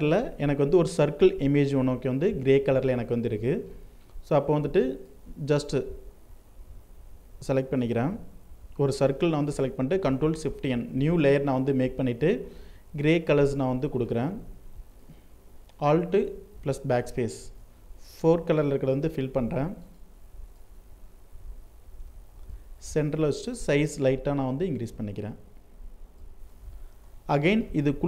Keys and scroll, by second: 9.4 ctrl+shift+n, 15.5 BackSpace, 16.9 ctrl+d, 22.5 ctrl+t.